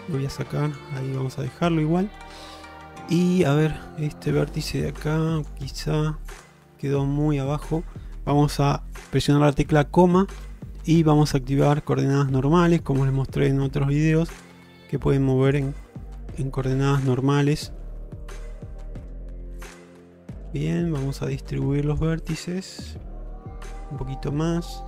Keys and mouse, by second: 0.8 click, 1.4-3.6 middle drag, 3.8 shift+middle click, 4.3 middle click, 5.4 click, 6.4 click, 6.7-7.3 middle drag, 7.5 shift+middle click, 12.0-12.6 middle drag, 12.8 shift+middle click, 14.3 click, 14.5 click, 15.9-16.7 middle drag, 16.9 shift+middle click, 17.3 middle click, 19.4 g, 20.4 middle click, 21.0 middle click, 21.4 middle click, 23.0 g, 24.5 alt+middle click.